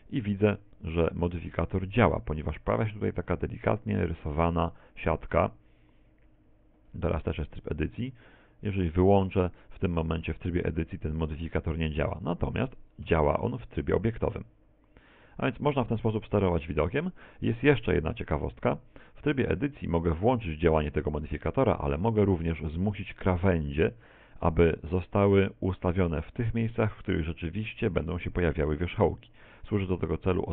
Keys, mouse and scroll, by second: 0.2 scroll down 1, 1.3 shift+middle click, 1.8 scroll up 2, 4.7 a, 5.1 z, 5.6 a, 6.3 a, 8.8 click, 13.1 Tab, 16.9 Tab, 18.6 a, 19.3 a, 20.3 click, 22.7 shift+middle click.